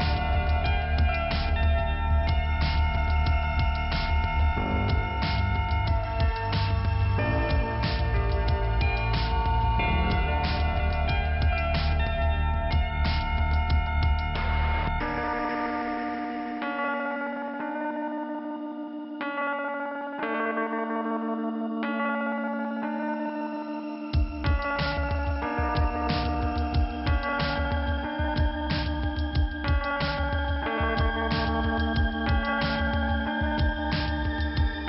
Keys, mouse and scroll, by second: 5.2 click, 6.2 click, 7.0 click, 9.9 Delete, 10.9 click, 12.6 click, 13.8 click, 16.6 click, 20.0 middle click, 21.3 click, 25.2 click, 26.2 click, 26.9 middle click, 28.1 click, 30.9 middle click, 31.0 middle click, 32.1 click, 33.4 click.